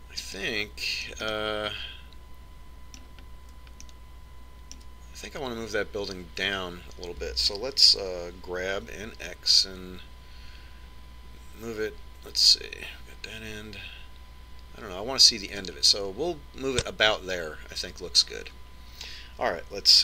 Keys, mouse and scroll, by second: 1.5-4.3 middle drag, 5.0-6.7 middle drag, 9.3 g.